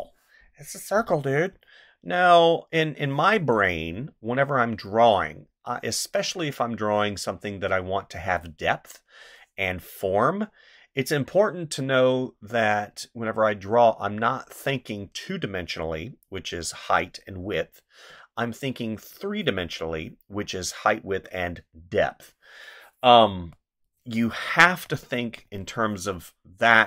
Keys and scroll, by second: 1.5 ctrl+z, 23.3 space, 24.6 space.